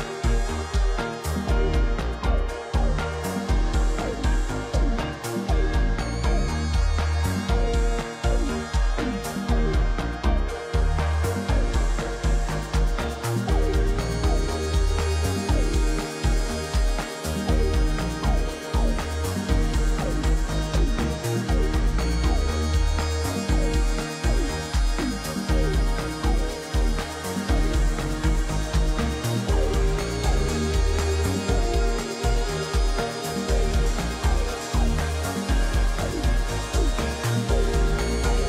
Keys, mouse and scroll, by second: 0.8 ctrl+j, 3.6 shift+click, 6.0 ctrl+g, 7.9 ctrl+-, 8.6 ctrl+-, 8.7 ctrl+-, 9.0 ctrl+=, 17.8 right click, 22.1 scroll down 2, 22.7 scroll down 2, 23.5 scroll down 2, 24.1-24.5 scroll down 9, 26.5 scroll down 2, 28.2 scroll down 1, 35.0 double click.